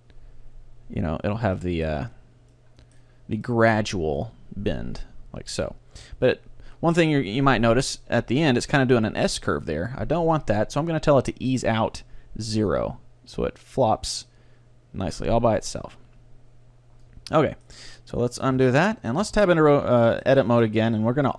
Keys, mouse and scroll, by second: 1.7-5.4 middle drag, 4.2-6.0 drag, 7.6-9.6 middle drag, 11.7-15.2 drag, 17.4 middle click, 18.6 alt+r, 19.3 Tab.